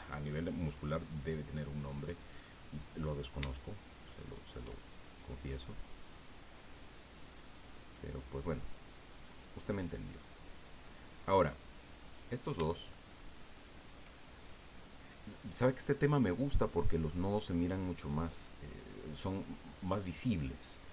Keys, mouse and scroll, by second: 0.6 click, 0.9 middle click, 1.4 right click, 1.8-3.3 drag, 4.2 shift+right click, 5.5-7.3 drag, 7.4 middle click, 9.1 right click, 10.4 click, 12.0 right click, 13.5 shift+right click.